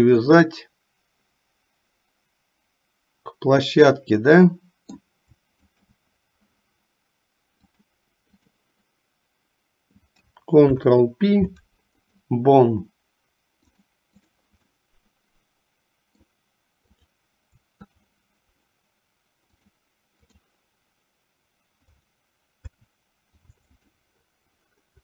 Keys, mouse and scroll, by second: 0.4-5.1 middle drag, 5.7 shift+click, 7.8 click, 10.6 ctrl+p, 13.7 click, 14.9-16.5 middle drag, 19.5 click, 22.6 ctrl+p.